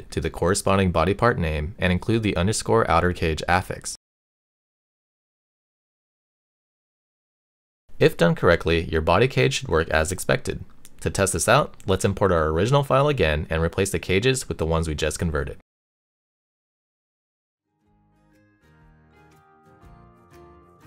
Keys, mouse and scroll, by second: 0.0 click, 0.4 shift+click, 0.8 p, 1.1 shift+Left, 1.4 shift+super+click, 1.7 p, 1.8 shift+click, 2.4 shift+click, 2.8 click, 3.5 click, 3.6 BackSpace, 3.7 Right, 4.5 shift+click, 5.0 p, 5.1 shift+click, 5.4 p, 5.6 shift+click, 6.2 click, 6.6 shift+click, 7.0 o, 7.4 shift+click, 7.6 shift+right click, 7.9 Delete, 8.1 click, 8.3 o, 8.6 click, 8.9 click, 9.1 BackSpace, 9.3 click, 9.4 shift+super+click, 9.9 p, 11.2 click, 13.0 click, 13.6 click, 13.9 click, 14.4 shift+click, 14.6 x, 14.8 click, 16.0 shift+click, 16.2 click, 17.0-17.8 drag.